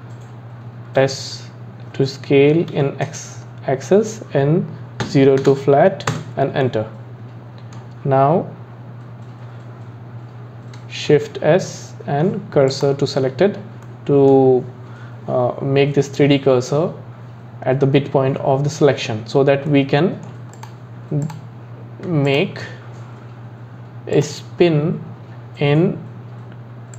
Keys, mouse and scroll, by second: 1.0 s, 6.6-9.8 middle drag, 11.1 shift+s, 13.8-16.9 middle drag, 19.7 middle click, 20.5 click, 21.2 click, 22.3 shift+click, 24.2-26.9 drag.